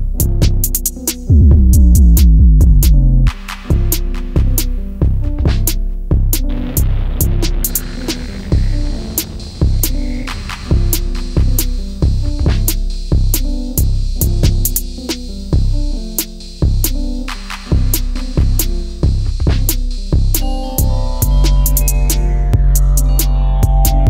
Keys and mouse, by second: 2.1 r, 2.8 1, 3.4 8, 3.6 0, 4.8 right click, 6.7-7.7 drag, 8.3 r, 9.2 drag, 9.9-13.4 drag.